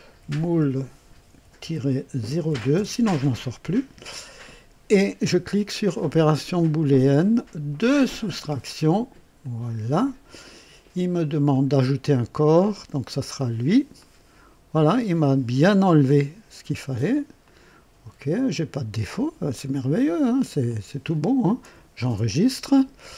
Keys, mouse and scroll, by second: 0.0-2.4 typing, 2.7 KP_Enter, 6.7 click, 8.4 click, 9.4 click, 11.5 click, 13.0 click, 13.9-16.8 drag, 17.4 click, 19.7 click, 20.6-21.4 drag, 21.9 ctrl+s, 22.6-23.1 ctrl+drag.